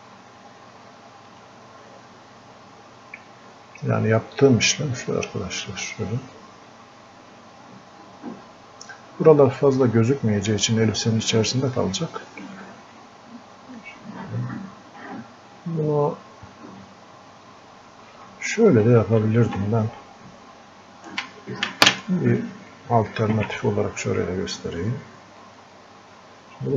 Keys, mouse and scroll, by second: 0.8-4.4 alt+drag, 4.4 alt+click, 5.7 alt+click, 6.6 alt+click, 7.3 alt+click, 8.1 alt+click, 10.1 click, 11.3-13.8 alt+drag, 13.8 alt+click, 15.3-18.8 drag, 18.8 ctrl+z, 25.4-26.7 drag.